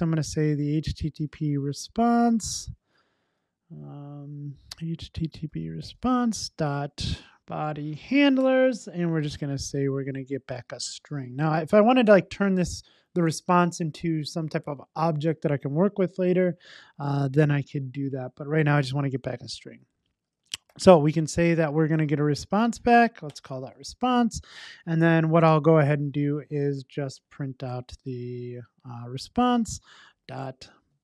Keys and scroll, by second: 8.5 Return, 21.0 Return.